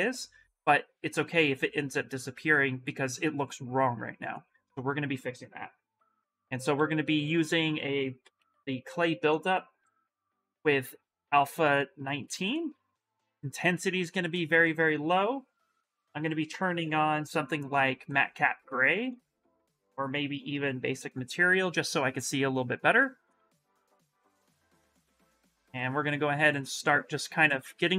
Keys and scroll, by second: 6.6 s, 7.7-8.7 typing, 12.3 space, 25.7 s.